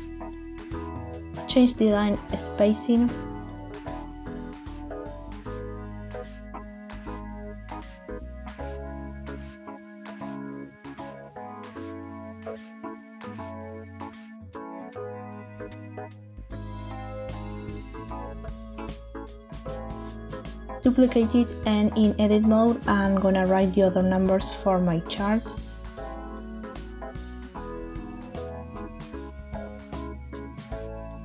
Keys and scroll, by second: 9.7 Tab, 20.4 shift+d, 22.5 Escape, 24.5 Tab, 26.3 Up, 26.5 Up, 26.9 Down, 27.0 Down, 27.2 Down, 28.2-30.1 typing.